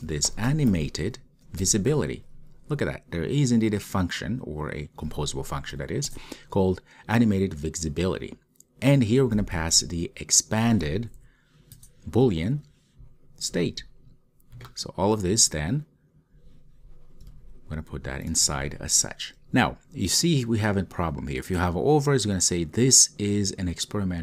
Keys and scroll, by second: 6.5 Return, 11.9 Return, 17.4 super+x, 18.6 super+v.